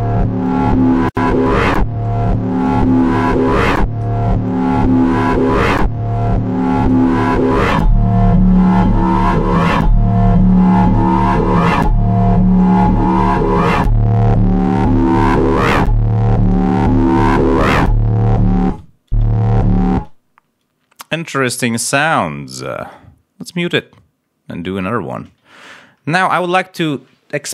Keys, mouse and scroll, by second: 0.4 click, 3.2 click, 4.3 click, 6.8 click, 7.4 click, 10.1 click, 11.3 click, 11.7 click, 17.5 ctrl+scroll down 2, 19.1 space, 21.9 click, 22.8 scroll up 1, 23.6 click, 23.9-24.8 scroll down 3, 25.4 ctrl+scroll up 1.